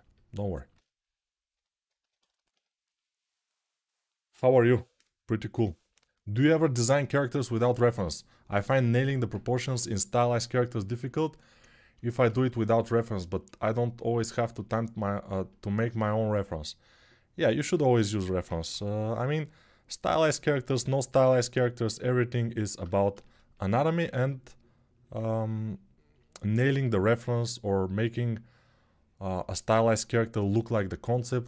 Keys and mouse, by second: 11.7-31.4 alt+shift+drag, 18.5 g, 23.5 1, 25.1 2.